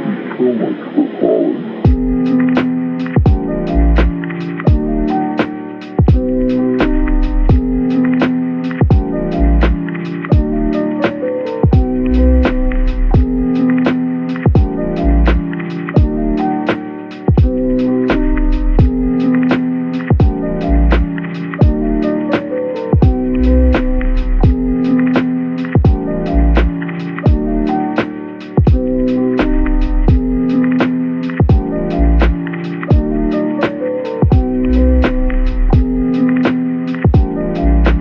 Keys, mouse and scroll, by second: 0.9 typing, 2.7 typing, 6.7 Tab, 7.2-7.9 typing, 9.2-10.2 typing, 13.2 Tab, 13.6 middle click, 14.3-14.7 scroll down 1, 16.0-16.5 scroll up 1, 16.7 middle click, 18.7 double click, 19.8 shift+click, 21.3-22.8 typing, 24.1 middle click, 26.3 shift+click, 26.6 typing, 28.0 middle click, 28.7 scroll down 1, 29.4-29.7 typing, 32.0 middle click, 34.9-35.4 typing, 36.8 double click, 37.4-37.8 typing.